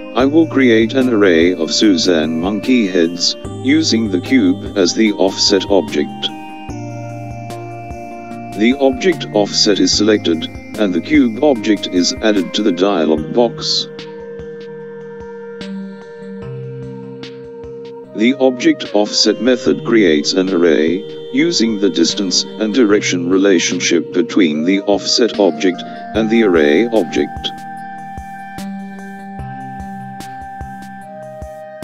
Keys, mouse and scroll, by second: 0.7 click, 3.0 click, 8.5 click, 10.5 click, 14.6 click, 23.8 click, 31.6-31.8 drag.